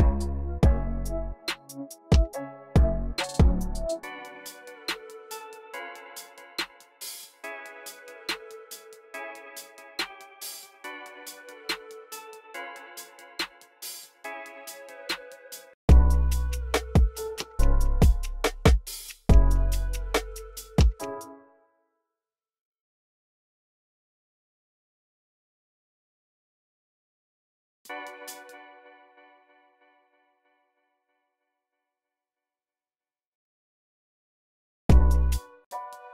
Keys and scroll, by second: 2.4 typing, 12.5 super+a, 12.7-15.6 typing, 20.9 space, 28.2 space, 33.3-36.1 typing.